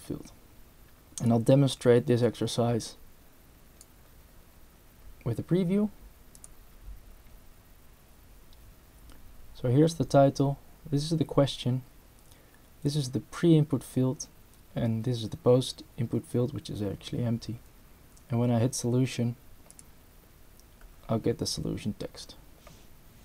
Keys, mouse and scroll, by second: 1.2-3.9 drag, 6.4 click, 19.7 click.